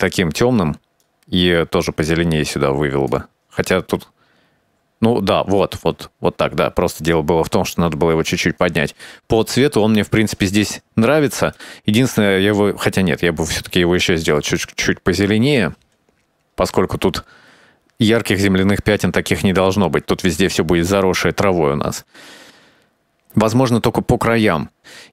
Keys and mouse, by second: 11.7 click.